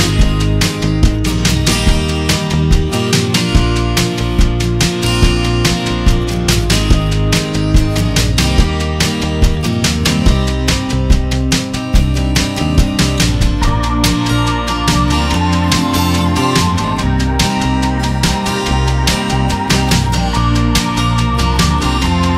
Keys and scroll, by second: 4.5 ctrl+d, 10.7 ctrl+j, 11.5 ctrl+t, 14.0 Up, 15.8 Down, 16.0 Up, 16.3 Down, 16.5 Up, 17.2 Return.